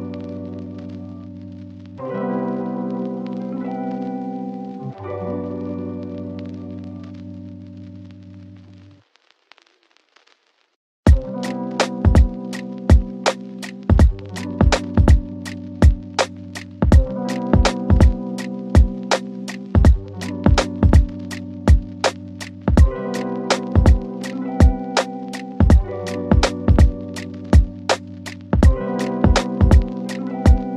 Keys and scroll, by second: 6.3 F3, 9.1 shift+F2, 9.5 Escape, 18.7 w.